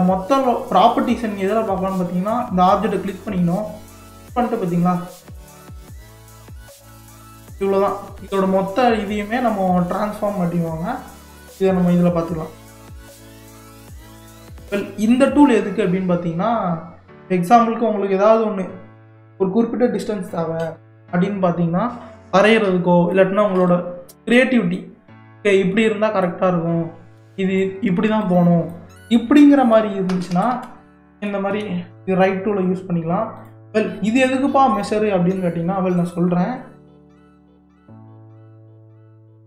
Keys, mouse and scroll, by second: 4.5 click, 11.1 click, 12.2-12.9 scroll down 1, 12.9-13.5 middle drag, 13.5 scroll up 4, 14.3-17.3 drag, 18.9-19.5 scroll up 1, 19.5-21.1 scroll down 1, 22.3-30.1 drag, 30.1 ctrl+z, 30.3 ctrl+z, 30.5 ctrl+z, 30.9 ctrl+z, 31.2 ctrl+z, 33.4-36.2 drag, 36.2-39.4 middle drag.